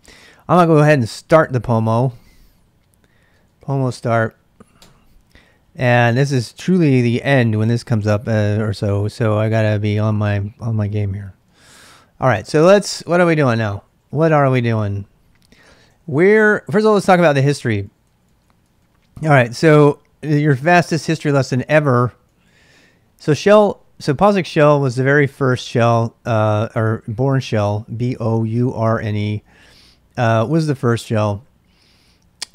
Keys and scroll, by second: 0.0-1.1 typing, 3.2-4.4 typing, 4.8 Return, 11.9-14.7 typing, 15.8-20.7 typing, 22.2-27.0 typing, 29.4-32.2 typing.